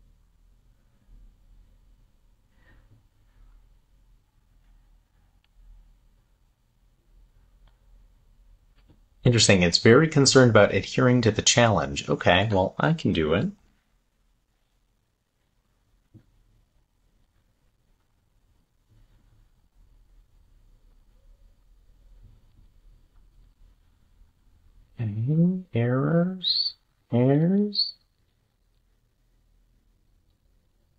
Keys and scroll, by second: 13.4 shift+super+p, 14.7 Down, 17.2 super+c, 20.3 super+c, 26.0 shift+super+d, 26.4 super+s, 27.1 Up, 30.8 super+v.